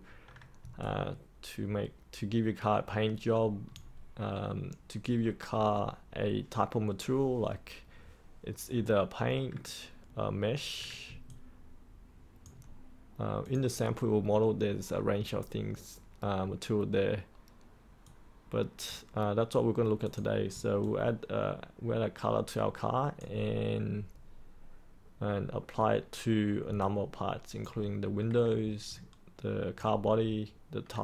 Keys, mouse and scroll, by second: 0.8-3.7 alt+drag, 11.2 alt+click, 13.4 click, 20.8-23.1 alt+drag, 26.7 alt+click, 28.8 alt+click.